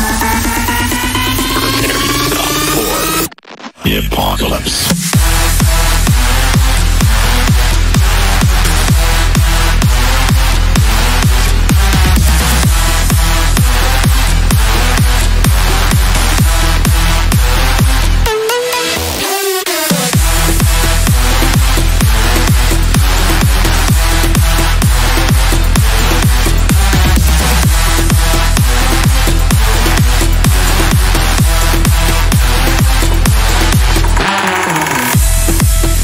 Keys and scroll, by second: 3.1 Escape, 8.9 Right, 10.8 F3, 11.8 F3, 14.7 shift+F2, 14.9 F3, 24.0 Delete, 28.8 F3, 29.9 ctrl+g, 31.3 c.